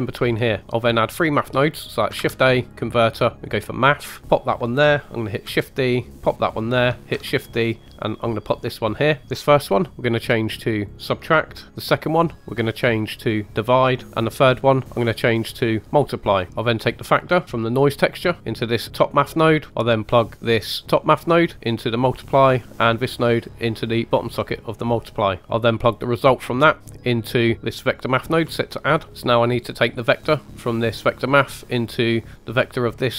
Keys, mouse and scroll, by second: 0.1 click, 2.1 shift+a, 4.2 click, 5.4 shift+d, 6.3 click, 7.1 shift+d, 8.4 click, 9.5-10.9 drag, 11.7-13.2 drag, 14.9-15.9 drag, 17.4-17.8 drag, 20.7 drag, 22.8 click, 23.0 click, 24.6 click, 25.4 middle click, 26.3-26.6 drag, 29.1 middle click, 30.0 drag.